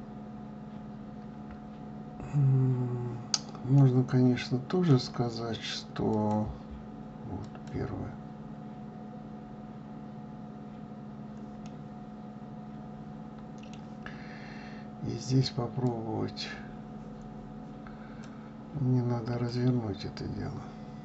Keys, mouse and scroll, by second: 3.8-7.6 middle drag, 7.6-11.7 drag, 11.7-16.1 middle drag, 16.1-21.0 drag.